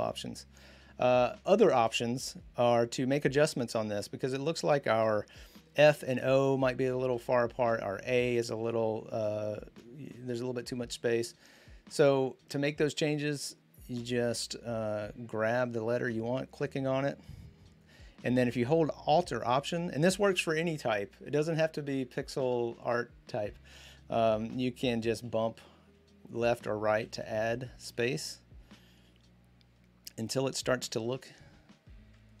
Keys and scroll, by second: 25.0 alt+Right, 25.6 alt+Left, 27.8 alt+Right.